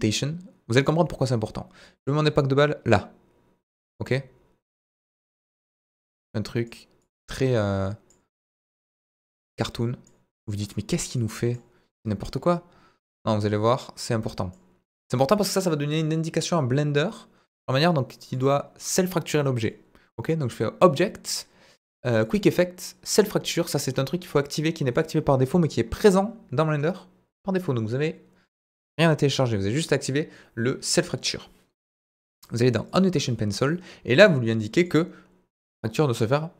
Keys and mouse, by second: 0.1 click, 3.9 click, 5.1 click, 6.0 click, 7.0-8.1 drag, 8.5 click, 9.3 click, 9.8 click, 10.4 click, 11.2 click, 13.4-14.5 drag, 15.6 middle click, 18.3 click, 19.3-19.6 middle drag, 20.6-36.5 drag.